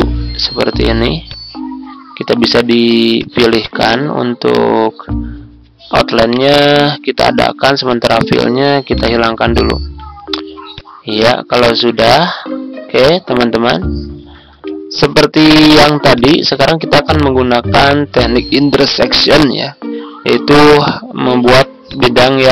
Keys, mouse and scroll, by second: 1.2-4.5 drag, 6.3 right click, 7.8 click, 9.7-10.7 ctrl+scroll up 1, 10.7-13.5 drag, 14.3-16.1 ctrl+scroll down 1, 16.1 click, 21.8 click.